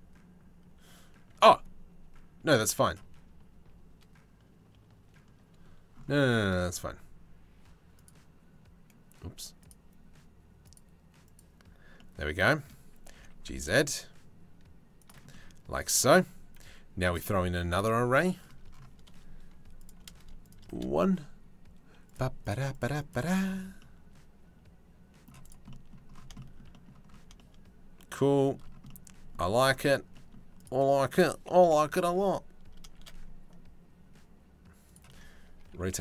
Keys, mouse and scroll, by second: 5.6 scroll up 1, 5.7 shift+middle click, 7.6 middle click, 10.3 middle click, 11.6 middle click, 12.3 click, 12.7 g, 14.9 click, 16.8 click, 19.5 click, 20.1 click, 21.7 click, 22.0 click, 22.4 click, 22.7 click, 24.0 middle click, 25.3 middle click, 27.8 shift+middle click, 28.5 middle click, 29.3 middle click, 29.8 click, 30.2 click, 31.3 KP_7, 32.6 shift+d, 35.3 r.